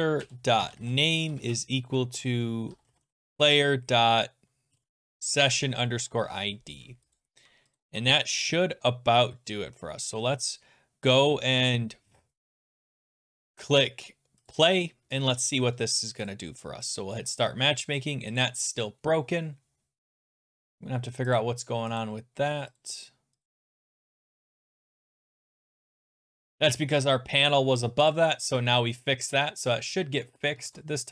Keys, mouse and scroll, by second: 0.0-6.5 typing, 7.2 click, 7.8 click, 7.9 ctrl+s, 14.5 click, 16.4 click, 16.9 click, 17.4 click, 18.0 click, 18.4 click, 19.9-20.4 scroll down 3, 20.4 scroll up 2, 21.4 click, 22.0 click, 22.0-22.7 scroll down 1, 22.8 click, 23.4 click, 23.8 click, 24.4 scroll, 25.6 click, 25.9 click, 26.5 click, 27.0 scroll, 27.1-28.0 scroll down 3, 28.1 click, 28.5 ctrl+s, 30.0 click, 30.6 alt+Tab.